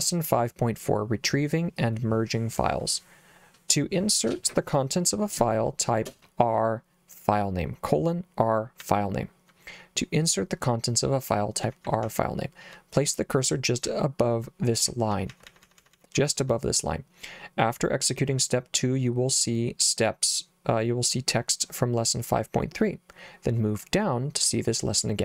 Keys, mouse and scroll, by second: 8.8 j, 11.7 k, 11.9 k, 12.0 k, 13.9 j, 14.9-16.4 typing.